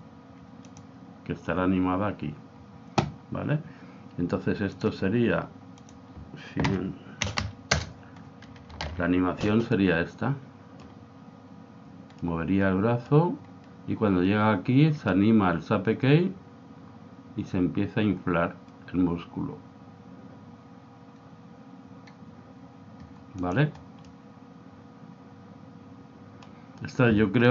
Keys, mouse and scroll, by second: 0.8 click, 4.9-7.4 drag, 7.4 0, 8.8 alt+a, 10.1 middle click, 12.5-14.2 middle drag, 23.6 click, 24.5-26.2 middle drag.